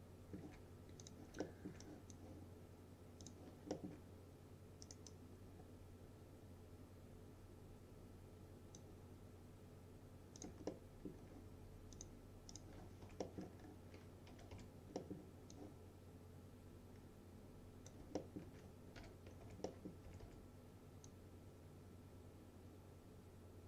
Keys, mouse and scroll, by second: 1.1 click, 1.5 alt+middle click, 1.9-2.5 drag, 3.8 alt+middle click, 4.9 right click, 5.1-8.9 drag, 10.7-11.4 alt+middle click, 12.0 click, 13.1 F3, 13.3 middle click, 13.7-14.4 scroll up 1, 14.1-15.1 typing, 15.0 middle click, 15.6-18.1 drag, 18.2 alt+middle click, 19.1-20.8 typing, 19.5 F3, 19.7 middle click, 21.1-23.6 drag.